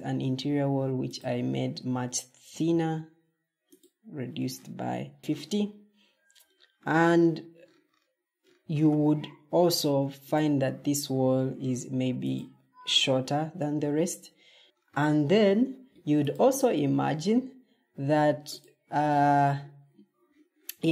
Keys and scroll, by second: 14.6 Escape.